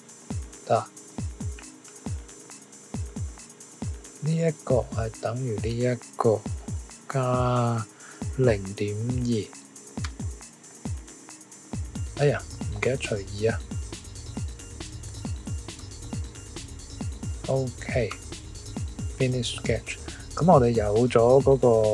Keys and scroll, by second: 6.9 shift+=, 8.1-9.2 typing, 10.0 Return, 14.1 Tab, 15.0 /, 15.3 2, 15.7 Return, 16.8 typing, 18.1 typing, 21.4 typing.